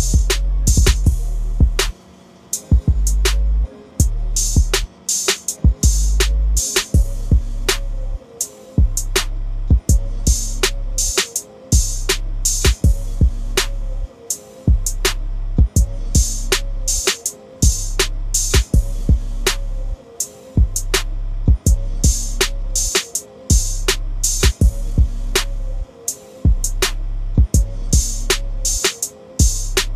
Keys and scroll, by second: 11.4 ctrl+d.